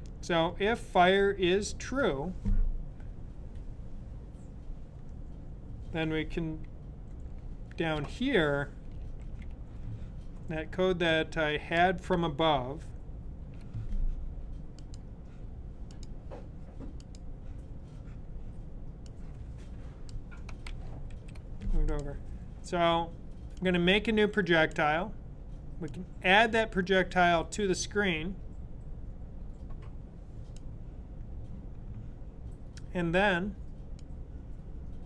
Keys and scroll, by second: 0.2 typing, 7.2 typing, 9.1 super+v, 12.0 super+v, 20.5 super+], 21.0 super+].